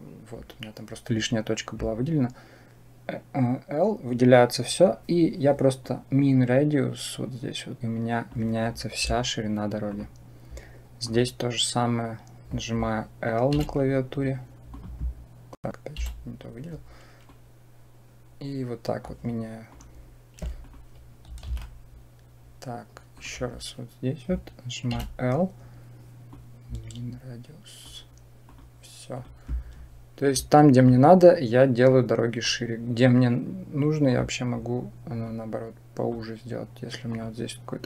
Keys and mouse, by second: 5.6-8.2 drag, 9.7 click, 14.5 click, 15.3 click, 15.8 l, 17.1-18.8 drag, 20.4 click, 21.3 alt+a, 23.0 click, 26.2-27.7 drag, 30.6 click, 31.7 click, 35.1 click, 36.9 click.